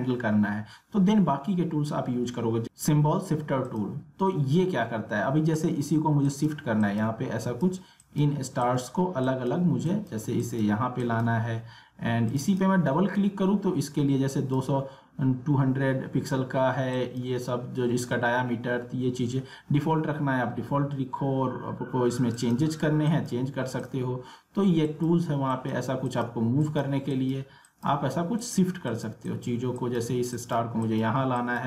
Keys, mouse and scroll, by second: 3.6 click, 16.9 click, 22.3-31.6 drag.